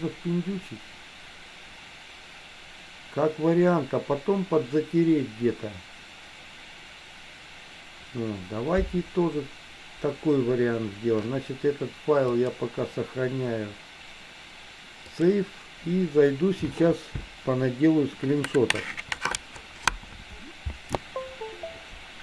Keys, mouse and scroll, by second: 12.3-15.4 drag.